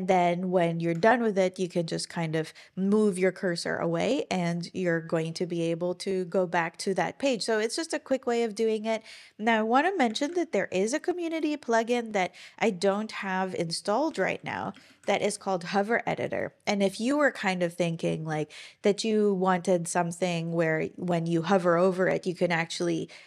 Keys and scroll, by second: 10.1 super+,, 13.8-15.5 typing, 17.2 typing.